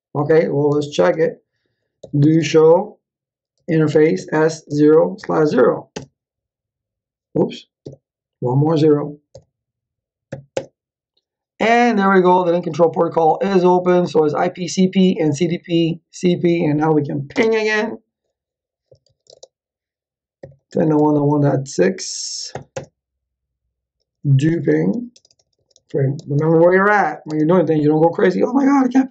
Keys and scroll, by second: 0.6 Return, 1.7-5.9 typing, 7.8 Up, 9.3 /, 10.2 0, 10.5 Return, 17.3 space, 18.6-23.0 typing, 23.7 Return, 24.2-27.6 typing, 28.8-29.1 typing.